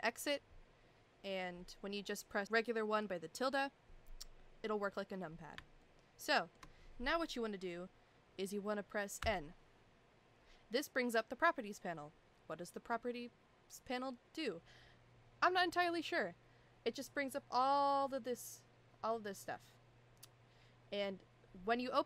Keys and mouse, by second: 2.4 KP_1, 5.8-6.6 shift+middle drag, 9.2 n.